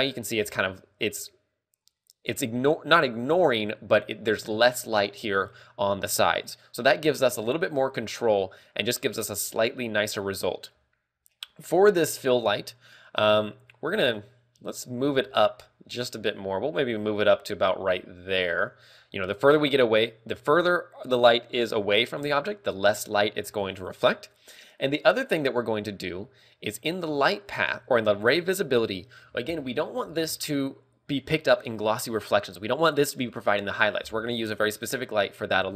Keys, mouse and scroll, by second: 8.5 click, 9.3 click, 15.1 KP_3, 15.1 KP_3, 15.7 g, 19.6 click, 27.0 click, 27.8 click.